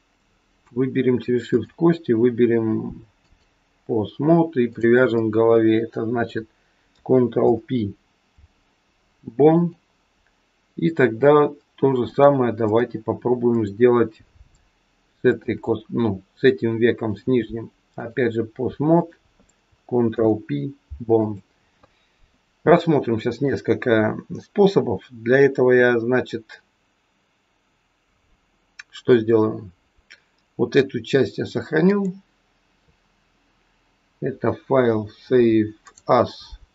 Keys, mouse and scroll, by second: 1.4 click, 4.7 click, 7.3 ctrl+p, 11.9 click, 13.5 click, 15.3 shift+click, 17.0 click, 18.9 click, 20.0 ctrl+p, 22.8 shift+middle click, 31.8 click.